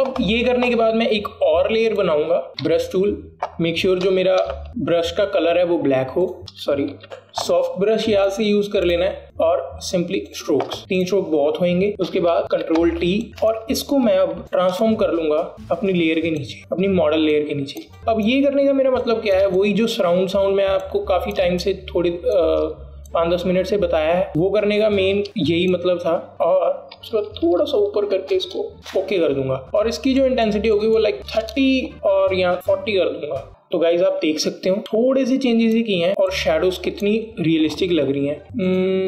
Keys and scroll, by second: 3.8 b, 4.7 x, 4.7 x, 12.9 v, 13.3 ctrl+t, 28.1 Up, 28.3 Up, 28.4 Up, 28.6 Up, 28.7 Up, 29.7 Return, 32.1 KP_3, 34.0 Return.